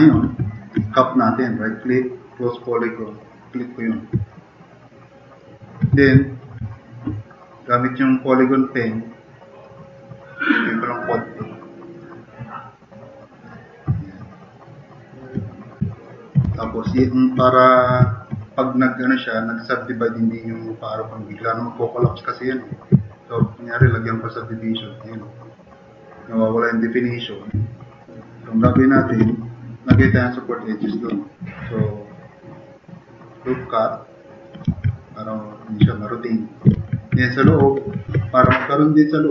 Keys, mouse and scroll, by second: 0.2 e, 0.5 drag, 3.7 click, 4.3-5.4 drag, 6.0 e, 11.9 click, 14.0-15.2 drag, 16.0-16.4 drag, 16.5 e, 16.7 e, 17.1 click, 18.0 drag, 26.3-26.7 drag, 28.7 `, 29.7-30.5 typing, 31.1-31.5 drag, 34.7 `, 36.0 click, 36.8-38.1 typing, 37.2 click.